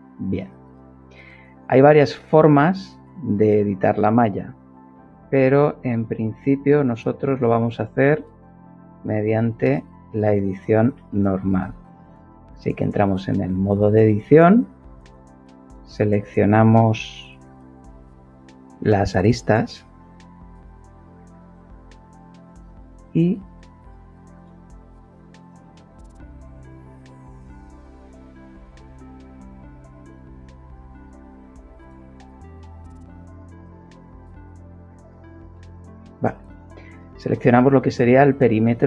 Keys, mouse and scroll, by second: 4.8 ctrl+Tab, 6.9 click, 8.1 middle click, 9.0 shift+middle click, 10.9 shift+middle click, 14.4 shift+click, 16.5 a, 22.9 middle click, 23.8-24.7 right drag, 24.7 click, 26.4 shift+click, 27.4 shift+click, 28.1 shift+click, 29.5 shift+click, 32.2 ctrl+shift+click, 32.8 ctrl+shift+click, 33.9 ctrl+shift+click, 35.0 ctrl+shift+click.